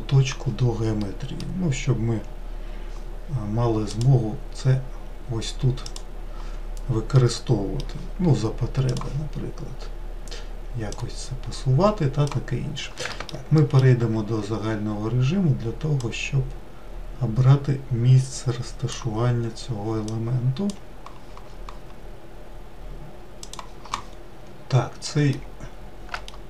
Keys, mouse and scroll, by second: 1.3-4.1 middle drag, 4.1-7.4 drag, 7.4-9.2 middle drag, 9.2-11.3 drag, 13.8 alt+middle click, 16.3 click, 20.4 click, 25.1-26.2 middle drag.